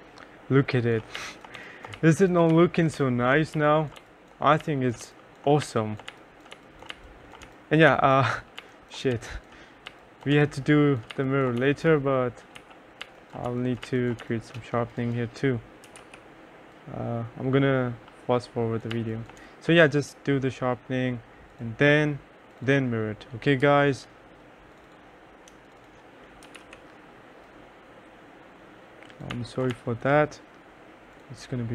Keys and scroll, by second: 1.1-8.0 typing, 9.3-16.6 typing, 19.1 2, 19.5 3, 23.8 m, 26.3-27.2 typing, 29.5 2, 29.9 3.